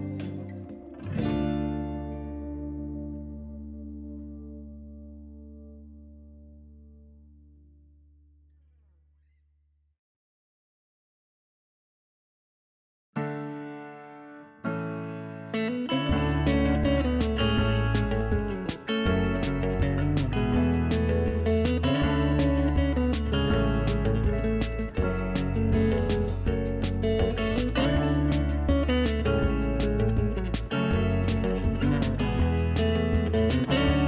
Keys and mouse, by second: 2.1 ctrl+shift+x, 2.4 click, 2.9 Up, 3.5 shift+click, 6.5 Up, 7.0 Left, 7.6 Right, 8.6 click, 12.9 click, 14.2-15.1 typing, 15.3 click, 15.9 click, 16.2 click, 16.8-17.7 typing, 17.5 click, 18.2 click, 18.8 click, 19.2-20.2 typing, 20.1 click, 21.3 v, 21.5 click, 21.7 click, 22.6 v, 22.8 click.